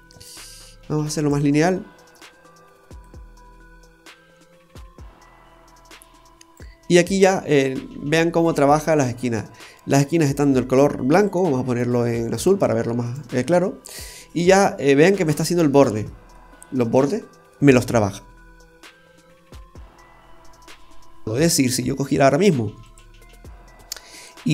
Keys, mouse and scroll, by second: 0.1 click, 3.0 click, 7.0 scroll down 1, 7.3 middle click, 7.9-8.2 scroll up 2, 8.6 middle click, 9.1 scroll up 1, 11.1 click, 13.7 scroll up 1, 13.9-14.2 scroll down 2, 14.5 middle click, 14.5-15.1 scroll down 3, 16.3 middle click, 21.2-21.6 scroll down 1, 21.6 middle click, 22.9 right click, 24.2 click.